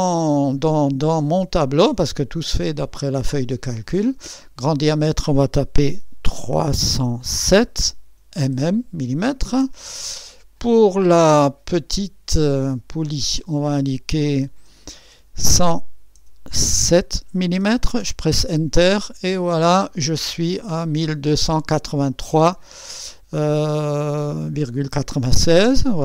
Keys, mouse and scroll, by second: 2.5 click, 4.7 click, 6.6-8.6 typing, 9.1 Return, 13.3 click, 15.1 KP_1, 16.1 KP_0, 16.8 KP_7, 17.3 m, 17.5 m, 18.0 Return.